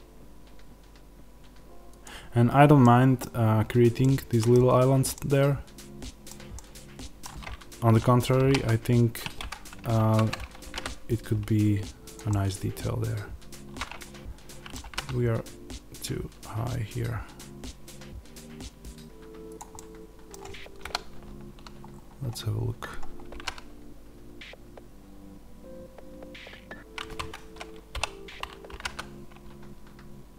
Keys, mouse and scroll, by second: 1.9 click, 2.7-19.5 middle drag, 3.6-3.9 scroll, 8.3 e, 9.4 Escape, 9.8 ctrl+z, 10.5 g, 12.0 click, 14.7 g, 19.5 click, 19.6-30.3 middle drag, 21.5 z, 21.8 scroll, 23.2 g, 27.2 Escape, 27.8 o.